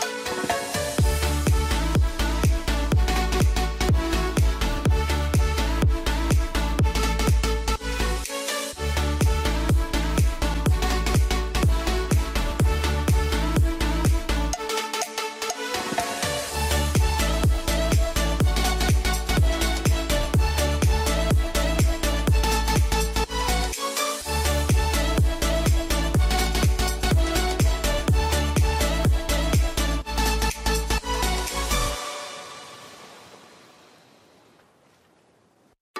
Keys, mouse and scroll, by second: 0.0 r, 0.5 click, 0.9 r, 1.3 click, 2.3 F3, 2.8 F4, 3.5 click, 4.7 right click, 5.6 F2, 5.9-13.7 drag, 14.0 shift+e, 14.6 click, 15.9 F3, 16.4 click, 17.9 click, 19.4-24.4 typing, 25.9-32.8 shift+drag, 34.6 End, 34.9 shift+Home.